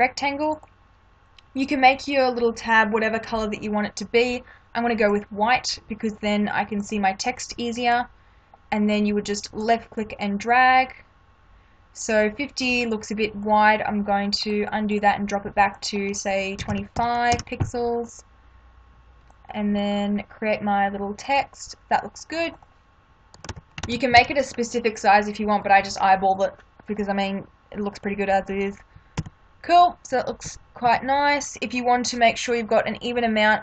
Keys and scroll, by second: 16.6 2, 16.9 p, 17.3 Return, 23.5 ctrl+=, 29.2 Left, 30.4 Left.